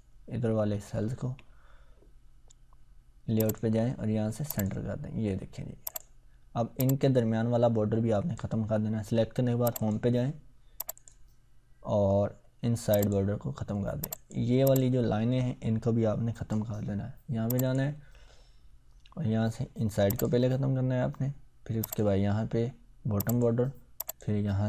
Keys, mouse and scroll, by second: 1.0 ctrl+scroll down 1, 3.4-8.6 drag, 20.1 click.